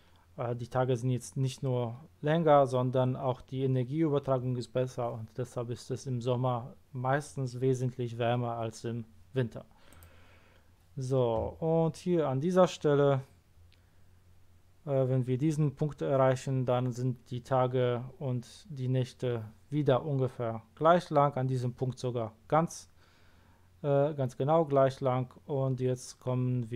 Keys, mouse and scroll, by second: 9.9 click.